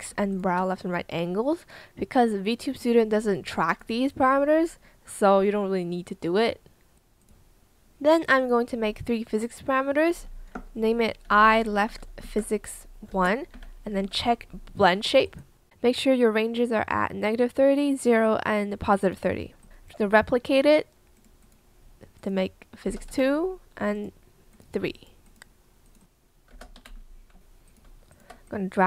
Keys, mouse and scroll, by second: 0.2 shift+click, 11.5-13.9 typing, 22.9 BackSpace, 23.1 KP_2, 23.2 Return, 26.5 BackSpace, 26.8 KP_3, 26.9 Return, 28.1 shift+click.